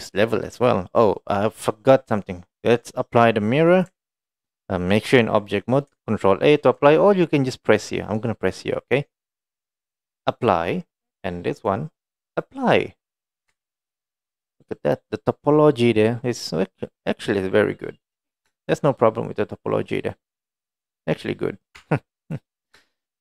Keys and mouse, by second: 9.5 click, 11.7-12.5 drag, 13.4 click, 13.5 Tab, 14.1-18.2 middle drag, 18.6 shift+middle click, 18.8-20.2 middle drag, 20.7 middle click, 21.8 Tab.